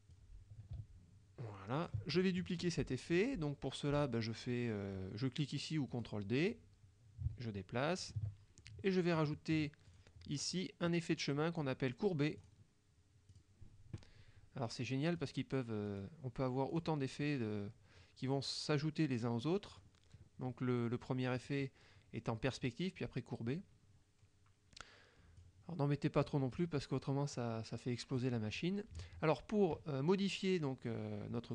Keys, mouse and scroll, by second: 0.2-2.1 drag, 2.2 ctrl+click, 6.0 click, 6.6-8.3 drag, 8.7 ctrl+middle click, 10.0 click, 11.3 click, 12.5 click, 13.4 click, 15.2 click, 15.9 click, 16.8 click, 19.8 click, 21.5 click, 25.4 click, 27.4 click.